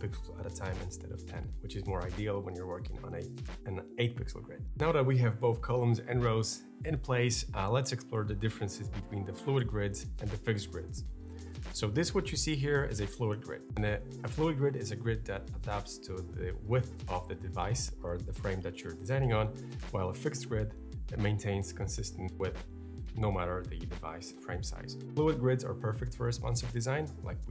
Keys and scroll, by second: 0.1 shift+Up.